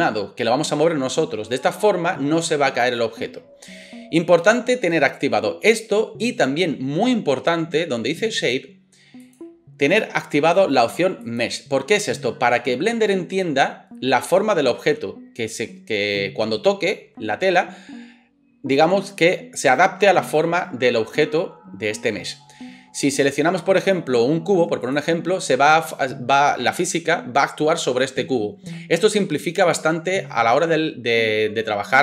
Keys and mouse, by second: 9.2-32.0 drag.